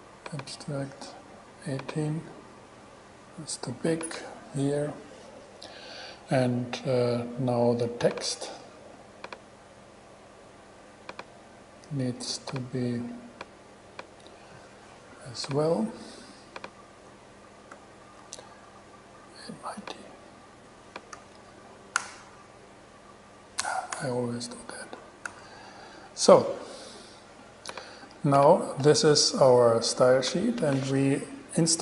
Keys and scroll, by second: 18.0 shift+super+e, 21.1-22.0 typing, 22.2 Return, 23.8 BackSpace, 25.2 shift+super+BackSpace, 25.5 shift+super+e.